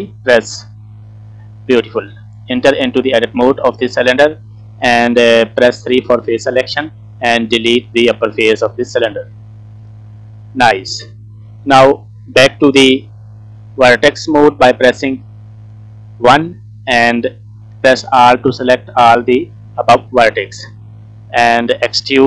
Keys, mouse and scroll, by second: 0.9 n, 1.4 middle click, 2.0-3.0 scroll up 1, 3.0 Tab, 3.0-3.6 scroll up 3, 4.4-5.4 scroll down 1, 5.9 3, 6.3 click, 7.3 Delete, 9.3 middle click, 9.7 scroll up 2, 10.0-10.5 scroll down 3, 10.5 middle click, 14.4 1, 15.7 scroll up 2, 16.6 click, 18.9 alt+click, 19.5 scroll down 2, 19.8 middle click, 21.9 e.